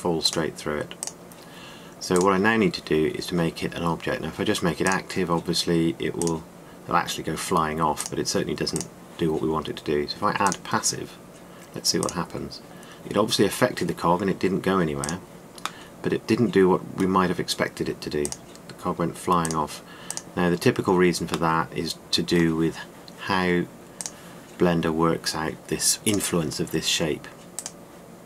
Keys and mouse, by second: 14.0-15.5 middle drag, 15.7-16.2 drag, 16.2-16.7 middle drag, 17.4-18.9 middle drag, 20.6-21.2 drag, 21.2 typing, 22.2 drag, 22.4-24.8 middle drag.